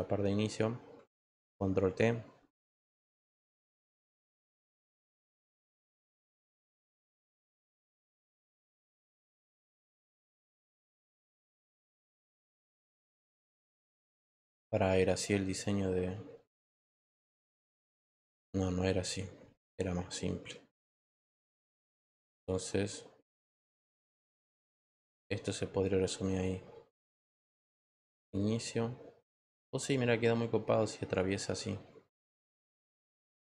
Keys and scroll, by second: 1.3 ctrl+t.